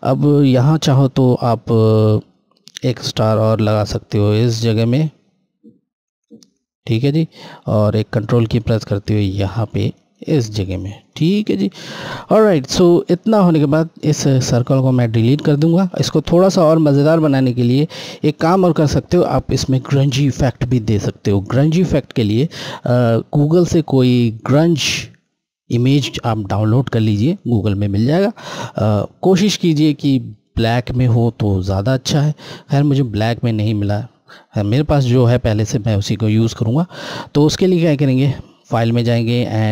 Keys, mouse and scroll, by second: 2.2 click, 6.0 right click, 7.2 click, 7.3 click, 9.9 ctrl+right click, 11.0 Left, 11.9-13.5 scroll down 1, 13.5 click, 15.9 Delete, 16.6 scroll, 16.8-17.4 scroll up 1, 21.9-23.8 scroll down 1, 37.5 click.